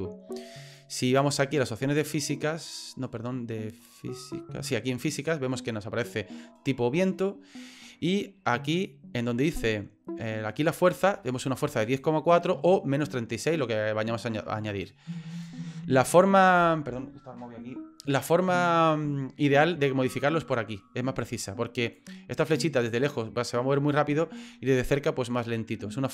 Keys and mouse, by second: 12.0-15.5 drag, 20.2-21.9 drag, 22.9-23.9 drag, 25.4 click.